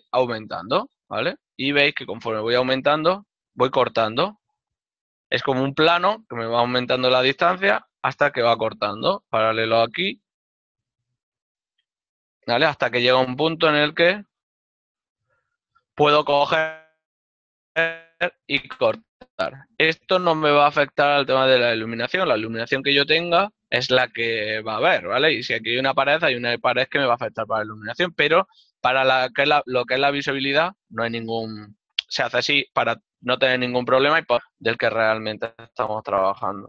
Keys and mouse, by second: 1.0 click, 10.1 ctrl+d, 10.1 click, 14.6 click, 33.1 middle click.